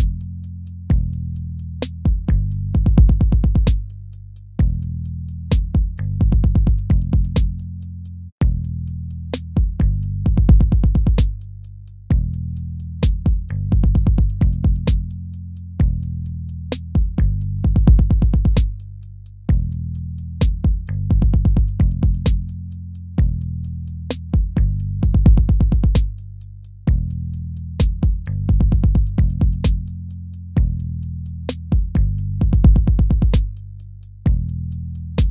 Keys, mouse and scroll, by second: 19.6 ctrl+-, 23.8 ctrl+-, 24.4 ctrl+-, 26.8 ctrl+-, 32.1 ctrl++.